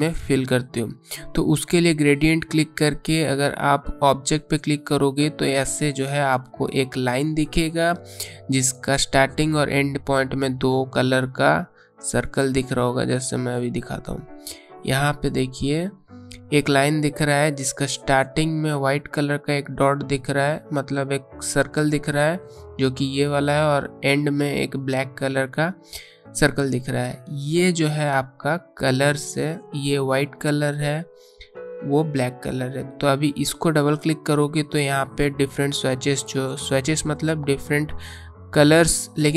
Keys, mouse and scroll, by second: 10.8-11.1 alt+scroll up 1, 11.8 space, 12.0 click, 12.3 space, 32.1 click.